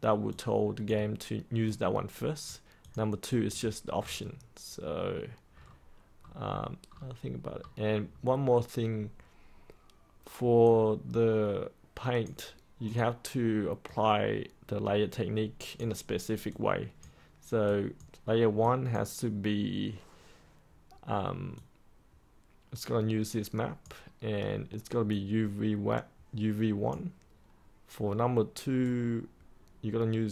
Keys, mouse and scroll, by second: 3.9-8.0 scroll down 1, 8.0-9.1 scroll up 1, 9.1-10.6 scroll down 1, 10.6-12.4 drag, 14.5-30.3 drag.